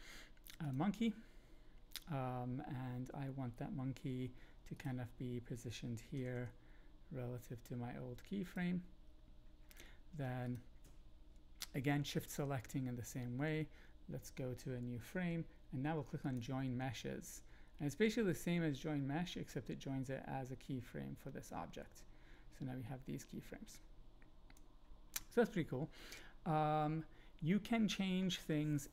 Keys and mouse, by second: 3.9 g, 4.7 click, 6.1 r, 6.3 r, 8.4 click, 13.3 Right, 13.5 Right, 16.3 click, 18.3-20.2 drag, 20.2-24.5 middle drag, 26.9 shift+middle click.